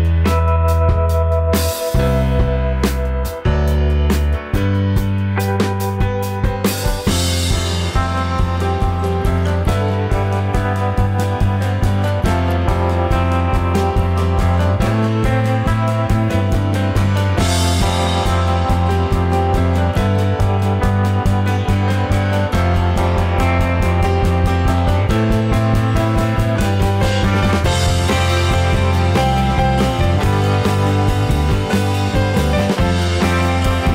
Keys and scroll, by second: 10.5 Return, 11.9 ctrl+t, 13.0 Return, 13.5 ctrl+j, 14.5 ctrl+t, 17.6 Return, 22.4 ctrl+t, 23.6 Return, 24.3 ctrl+j, 24.9 ctrl+t, 27.6 Left, 28.2 Return.